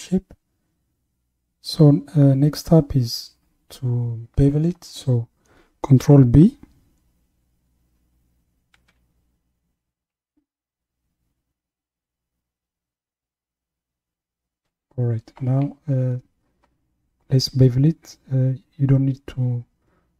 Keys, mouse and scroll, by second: 8.7 ctrl+b.